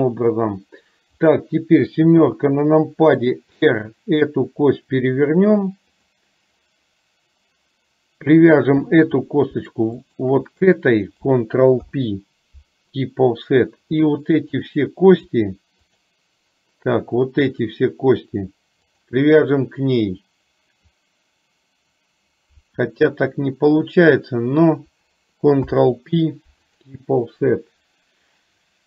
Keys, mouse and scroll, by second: 1.3 click, 2.3 KP_7, 3.7 r, 10.2 shift+click, 11.9 ctrl+p, 14.7 click, 16.1 shift+click, 17.6 shift+click, 25.7 ctrl+p.